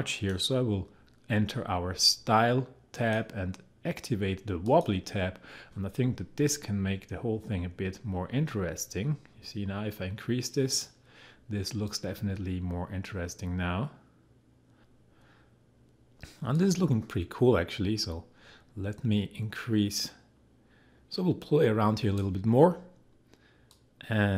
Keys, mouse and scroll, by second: 2.9-16.5 drag, 16.5-24.3 drag.